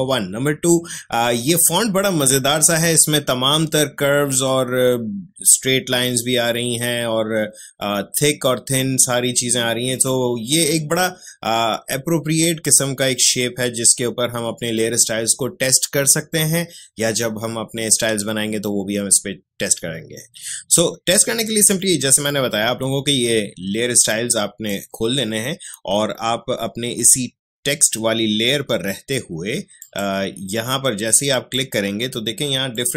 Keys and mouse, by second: 22.3-29.8 drag.